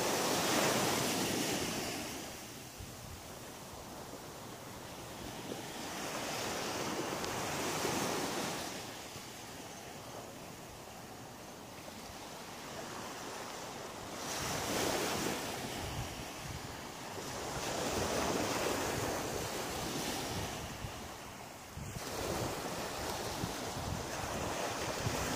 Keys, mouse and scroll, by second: 0.3 shift+right click, 0.9 shift+right click, 1.4 shift+right click, 2.5 shift+right click, 3.1 shift+right click, 3.6 shift+right click, 5.6 shift+right click, 6.1 shift+right click, 6.7 shift+right click, 7.1 shift+right click, 7.6 middle click, 8.7 shift+right click, 9.2 shift+right click, 9.6 middle click, 10.7 shift+right click, 12.0 click, 12.5 middle click, 14.0 g, 15.4 click, 15.7 middle click, 21.7 KP_7, 22.6 shift+middle click, 24.3 r.